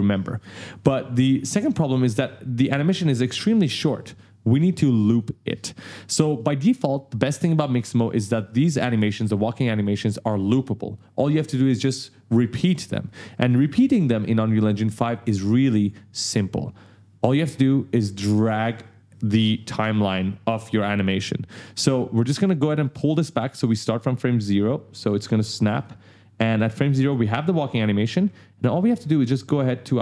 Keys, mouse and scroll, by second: 2.4 click, 23.5 click, 25.6 click, 28.2-28.6 ctrl+scroll up 2, 29.2 click.